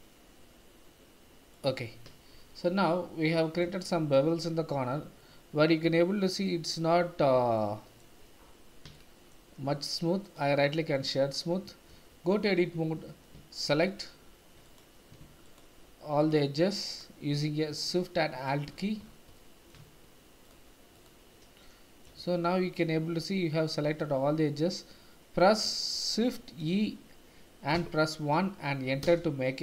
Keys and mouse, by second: 1.5 click, 2.4 shift+z, 3.3 middle click, 3.9 shift+middle click, 4.6 Tab, 5.2 middle click, 5.4 click, 5.5 middle drag, 5.6 click, 5.8 click, 6.0-6.6 middle drag, 7.6-8.0 shift+middle drag, 8.9 shift+middle click, 10.3 click, 11.9 Tab, 14.7 click, 15.4 alt+shift+click, 16.2 alt+shift+click, 16.8 alt+shift+click, 17.9 middle click, 19.3 middle click, 20.4 alt+shift+click, 21.6 middle click, 22.2 shift+z, 22.8-24.0 middle drag, 26.2 shift+e, 27.7 KP_1, 29.0 KP_Enter.